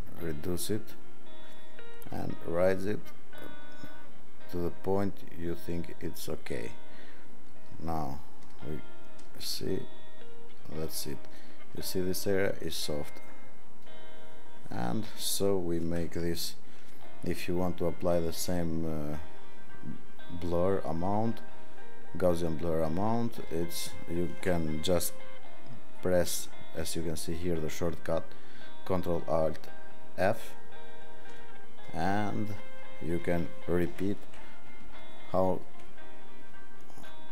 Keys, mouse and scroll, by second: 2.4 click, 5.4 click, 10.6 click, 23.5 ctrl+alt+f, 33.9 ctrl+alt+f.